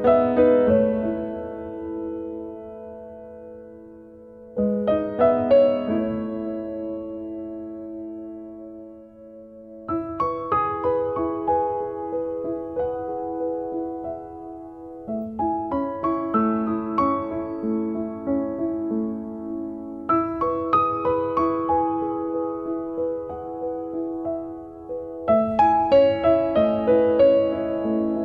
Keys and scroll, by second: 3.2 space, 7.7-8.7 typing, 9.7 Return, 14.9-16.3 typing, 16.8 Return, 23.7 Delete.